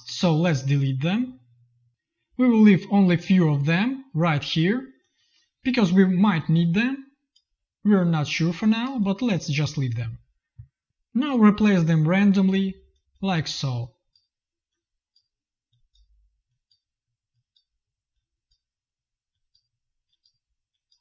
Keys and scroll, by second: 0.4 Delete, 1.9 ctrl+z, 5.6 Delete, 8.8 space.